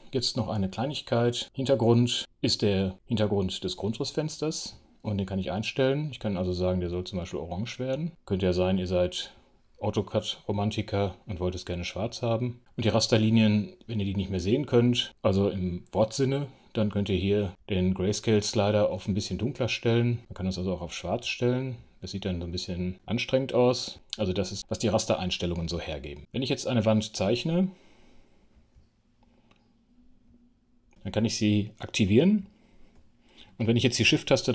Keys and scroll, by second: 23.9 F6.